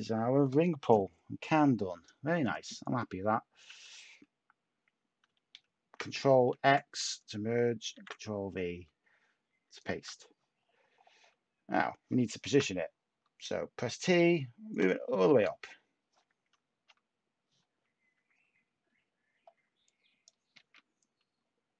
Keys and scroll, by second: 6.5 ctrl+x, 7.9 ctrl+v, 12.5 t, 15.2 shift+a, 20.5 ctrl+z.